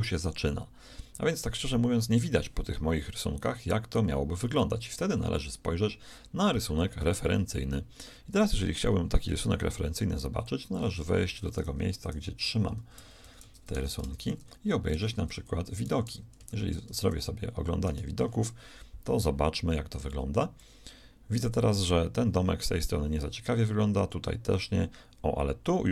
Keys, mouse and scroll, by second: 3.5 ctrl+KP_3, 4.4 ctrl+KP_1, 5.4 KP_1, 7.5-9.8 shift+middle drag.